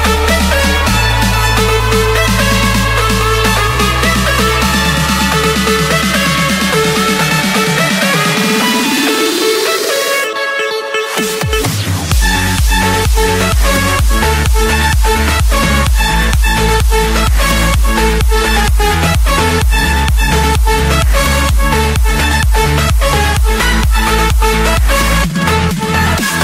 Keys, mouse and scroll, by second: 2.0 click, 2.4 scroll up 4, 2.6-3.1 scroll, 3.4 Escape, 5.0 click, 7.3-8.4 drag, 9.4-10.5 drag, 11.1-13.8 typing, 12.7 Return, 14.6 scroll, 15.5-16.8 scroll, 16.8 Escape, 17.7-18.9 typing, 19.0 Return, 20.9 typing, 21.6 Return, 23.5-24.6 drag, 24.9-26.0 drag.